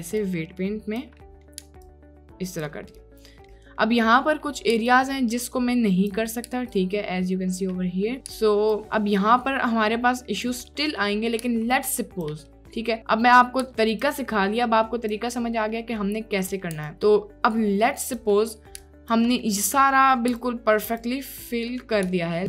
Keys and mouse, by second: 0.3 ctrl+click, 1.2 click, 1.9-2.7 ctrl+drag, 2.9 drag, 3.1 middle drag, 3.5 middle drag, 4.2 click, 6.8 ctrl+middle click, 7.7 click, 8.8-10.6 ctrl+drag, 10.7 click, 11.8 ctrl+click, 12.6 click, 13.1 click, 14.2-15.3 ctrl+drag, 15.4-15.7 drag, 16.5 middle click, 18.9-19.3 ctrl+drag, 19.4 click, 21.1 ctrl+click, 22.2 shift+click.